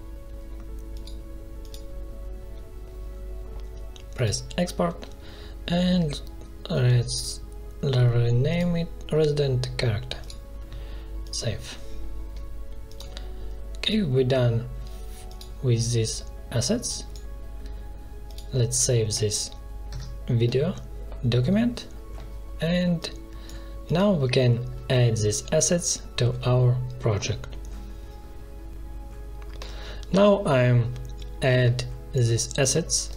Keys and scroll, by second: 19.8 ctrl+s.